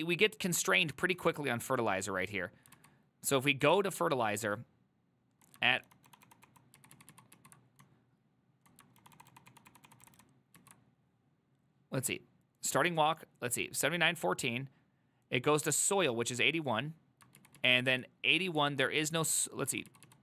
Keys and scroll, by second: 0.0-0.8 typing, 2.8 ctrl+u, 2.8-5.9 typing, 3.6 ctrl+u, 5.9 ctrl+d, 6.2 ctrl+d, 6.3 ctrl+d, 6.5 ctrl+d, 6.9 ctrl+u, 7.0 ctrl+u, 7.2 ctrl+u, 7.4 ctrl+u, 7.9-9.1 typing, 9.1 ctrl+d, 9.2 ctrl+d, 9.4 ctrl+d, 9.6-10.7 ctrl+d, 10.7 ctrl+u, 17.7 ctrl+u, 18.0 ctrl+u, 18.7-20.2 ctrl+u.